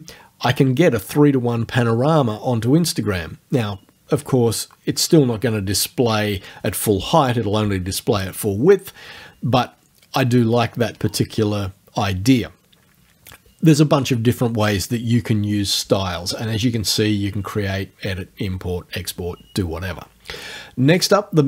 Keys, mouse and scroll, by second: 21.0 click.